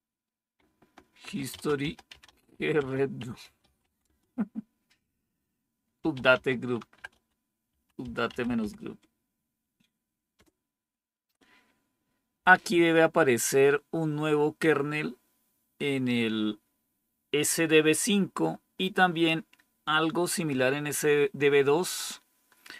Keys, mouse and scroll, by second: 0.9-10.8 typing.